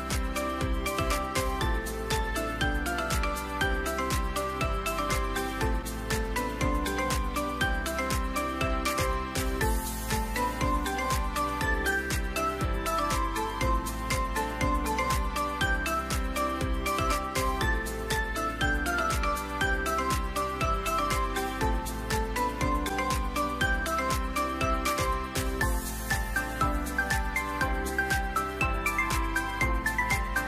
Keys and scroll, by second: 21.9-23.3 typing, 23.5 Return, 27.0-28.5 typing.